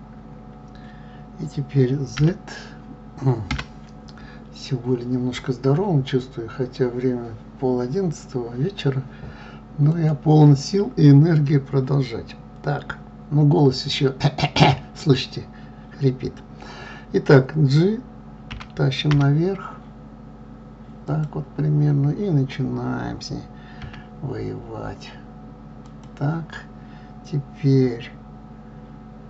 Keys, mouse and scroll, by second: 10.0 click, 18.5 g.